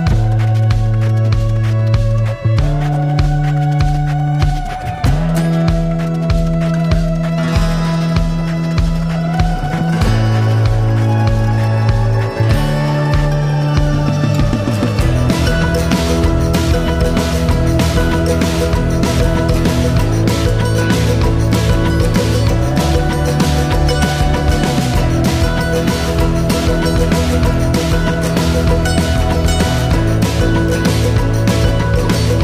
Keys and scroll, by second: 6.0 ctrl+z, 18.3 ctrl+l.